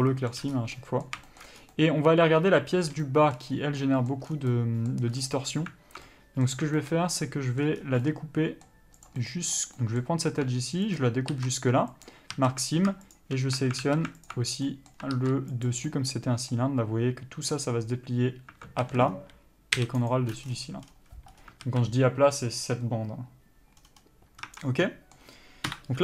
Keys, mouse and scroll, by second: 0.0 alt+a, 0.3 middle click, 0.8 scroll up 1, 1.0 middle click, 1.5 shift+middle click, 1.8 scroll up 1, 2.0 middle click, 3.8-4.1 scroll up 1, 4.1 middle click, 4.5 scroll down 1, 4.8 middle click, 5.4-6.3 scroll up 1, 6.3 middle click, 7.0 shift+middle click, 7.4 middle click, 8.1 scroll up 1, 8.4 middle click, 9.3 click, 9.5 middle click, 11.3 ctrl+click, 12.4 ctrl+e, 12.6 a, 13.4 alt+shift+click, 14.1 alt+a, 14.5 alt+click, 14.8 scroll down 1, 14.9 middle click, 15.9 ctrl+e, 16.2 middle click, 19.1 a, 19.3-19.6 scroll down 1, 20.4 u, 21.9 alt+a, 24.1-24.7 scroll down 1, 24.7 Tab, 24.9 scroll down 1, 25.1 middle click.